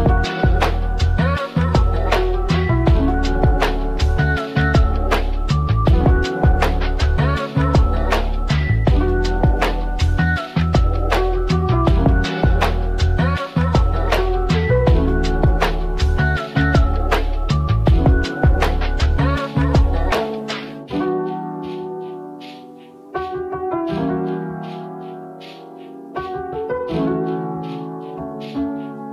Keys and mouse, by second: 0.9 s, 3.5 middle click, 4.1 click, 5.3 r, 9.4 1, 9.6 8, 9.9 0, 10.8 Return, 11.4 Tab, 12.5 click, 13.1 x, 14.9 g, 16.0-17.4 middle drag, 17.4 r, 18.6 click, 19.0 g, 19.9-21.7 drag, 22.5 click, 23.3 r, 24.6 click, 25.0 g, 26.6 click, 27.1 e.